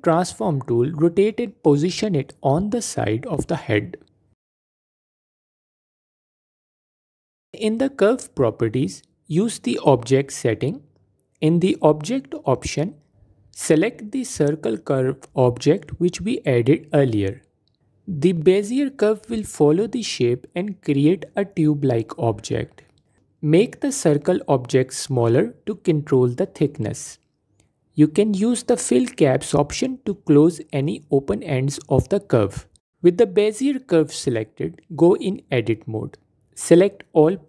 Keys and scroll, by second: 0.6 typing, 24.7 s, 33.4 Tab, 35.2 a.